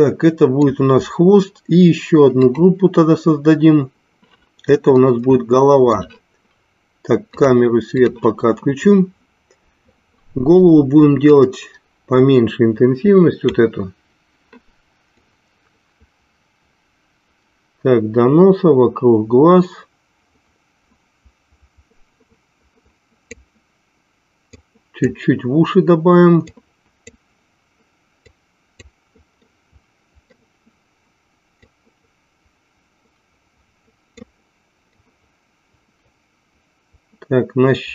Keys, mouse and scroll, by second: 2.4 click, 4.9-6.1 middle drag, 7.4 click, 11.2-13.5 drag, 15.2-23.6 drag, 24.8 click, 26.6 click, 28.4 click, 29.5 middle click, 31.7-34.2 drag, 35.1-37.9 drag.